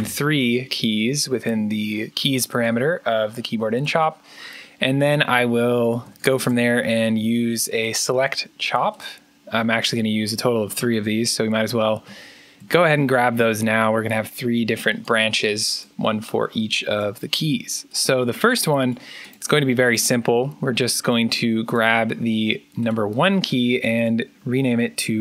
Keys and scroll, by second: 4.6-8.1 typing, 10.6-11.3 typing, 11.9 ctrl+c, 12.6 ctrl+v, 13.2 ctrl+v, 24.8-25.2 typing.